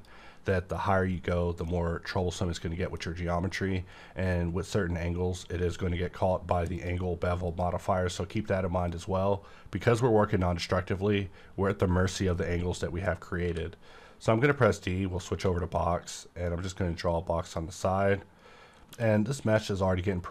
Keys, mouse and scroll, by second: 1.4 scroll down 1, 1.7-3.1 middle drag, 3.1 scroll up 1, 6.8 click, 7.5 click, 12.2-13.4 scroll down 1, 13.4 d, 14.5 click, 14.5 click, 15.3 shift+middle click, 16.5-20.3 drag, 18.9 w.